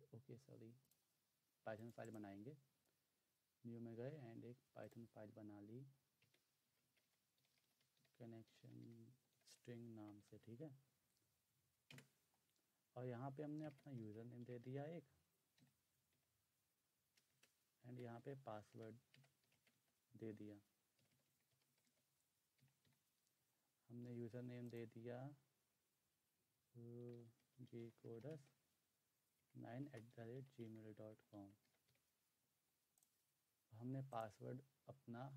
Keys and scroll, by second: 6.6-10.8 typing, 11.9 Return, 13.4-16.2 typing, 17.3 shift+Return, 17.9-22.9 typing, 26.8-28.3 typing, 29.4-32.3 typing.